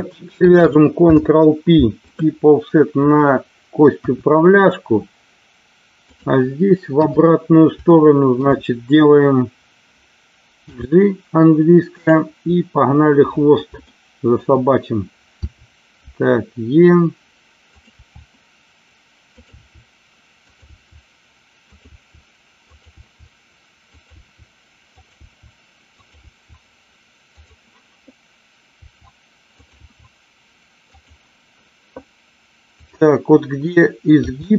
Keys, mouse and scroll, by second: 0.9 ctrl+p, 3.9 KP_1, 6.8 KP_3, 7.8 shift+middle click, 10.6 g, 11.9 click, 13.9 shift+middle click, 15.4 e, 17.6 click, 18.1 e, 19.3 click, 19.5 e, 20.4 click, 20.7 e, 21.6 click, 21.8 e, 22.6 click, 22.9 e, 23.9 click, 24.1 e, 24.9 click, 25.2 e, 25.9 click, 26.2 e, 27.3 click, 28.9 e, 29.8 e, 30.9 click, 32.6 click, 34.2 g.